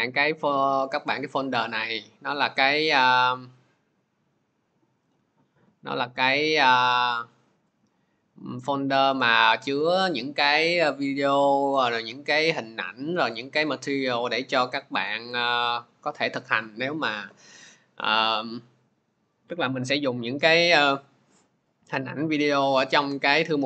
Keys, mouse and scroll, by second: 1.6 click, 3.1 click.